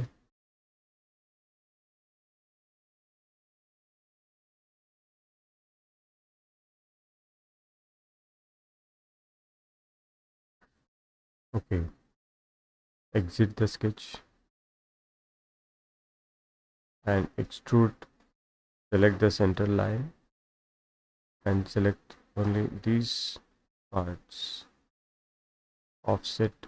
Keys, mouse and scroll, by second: 1.7 click, 2.7 click, 5.4-8.2 drag, 8.2 Escape, 8.7 Escape, 9.0-11.0 middle drag, 9.0-9.6 scroll, 9.9-10.3 scroll, 12.7 click, 14.8 click, 15.7 middle click, 16.4 Escape, 17.4 click, 19.6 click, 22.4 click, 23.9 click, 26.0 click.